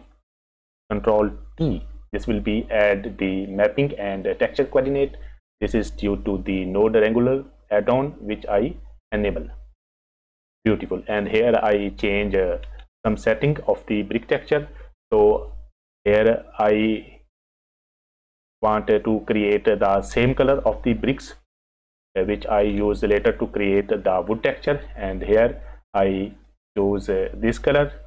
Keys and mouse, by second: 1.6 ctrl+t, 2.6 click, 9.9 click, 11.7 click, 15.8 click, 23.3 click, 26.5 click.